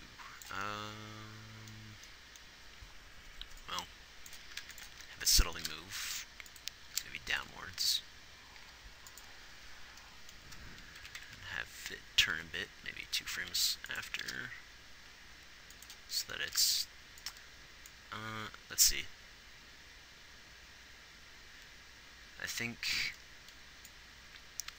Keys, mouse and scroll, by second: 5.0 ctrl+s, 5.9 g, 7.3 g, 9.0 g, 11.3 Right, 11.5 Right, 13.7 r, 14.5 r, 16.8 r.